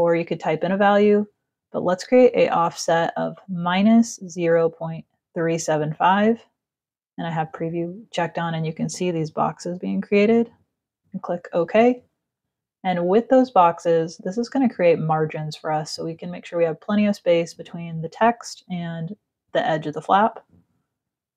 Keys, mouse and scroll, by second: 0.5 Down, 10.3 click.